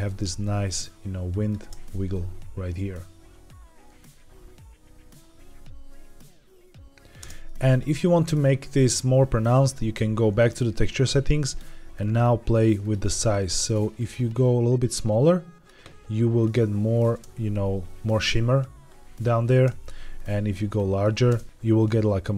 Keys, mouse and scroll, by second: 0.4-1.4 drag, 1.5 space, 7.3 space, 8.3-10.2 drag, 10.4-12.0 drag, 12.7 click, 14.0-15.6 drag, 16.3-17.0 drag, 17.1 space, 19.5 space, 20.1 click, 21.2 space.